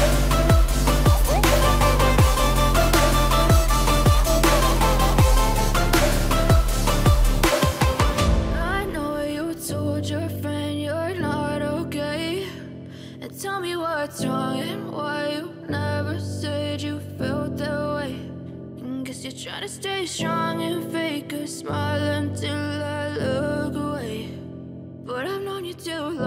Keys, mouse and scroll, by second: 4.5-14.1 drag, 14.1 right click, 16.2-26.2 drag.